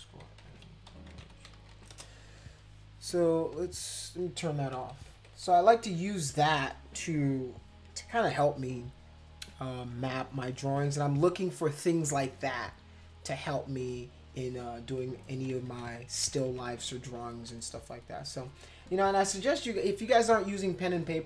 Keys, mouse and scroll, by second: 0.0-2.2 typing, 3.1-3.5 scroll up 2, 3.5 click, 4.0 scroll up 2, 4.7 ctrl+-, 5.1 ctrl+-, 5.2 ctrl+-, 5.5 ctrl+-, 5.9 ctrl+=, 9.9 click, 15.3-16.7 typing.